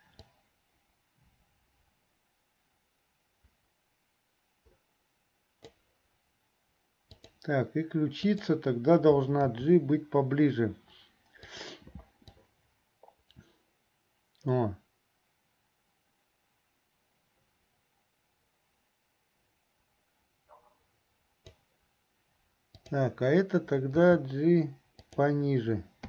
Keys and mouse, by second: 0.4-6.0 drag, 7.2 click, 8.3 click, 12.6-21.8 drag, 22.8 click.